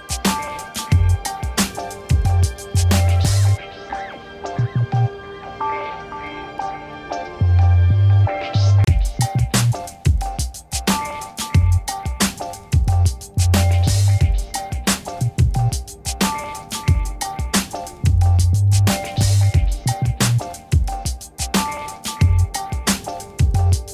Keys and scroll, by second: 0.7 b, 1.1 5, 7.9-10.1 typing, 17.6 6.